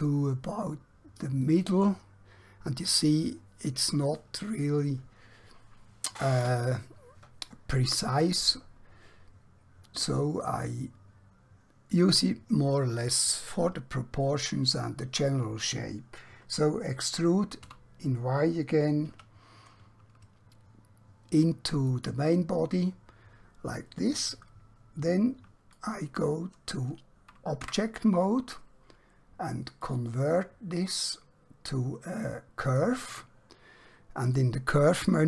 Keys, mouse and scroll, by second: 0.0 typing, 1.5 click, 10.4 click, 17.7 e, 22.0 click, 25.7 click, 27.7 Tab, 29.8 click, 32.6 click.